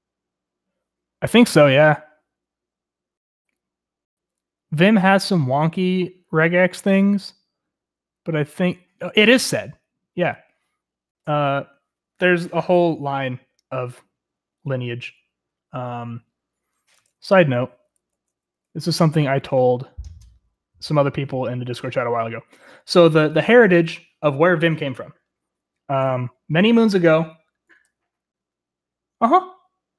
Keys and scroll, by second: 17.0 Escape, 17.8 j, 18.0 j, 18.6 j, 22.0 typing.